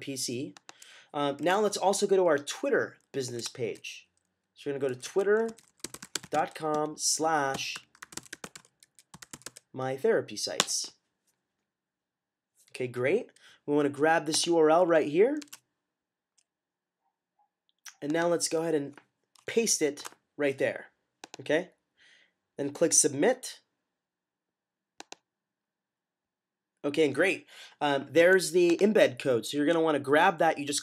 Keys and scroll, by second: 3.3 typing, 4.5-9.8 typing, 15.3 typing, 19.9 typing.